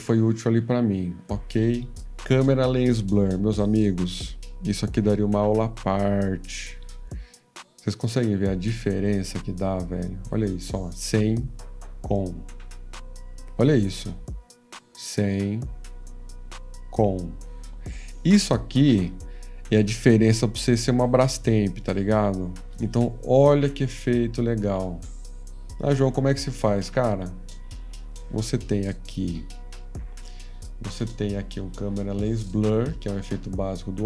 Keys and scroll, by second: 4.2 F15, 28.3 F13, 29.3 F14.